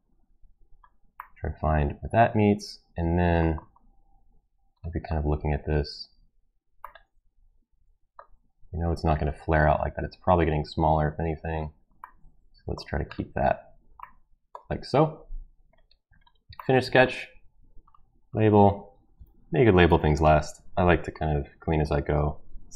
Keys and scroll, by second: 18.9 ctrl+v, 19.8-20.2 typing, 22.7 Right.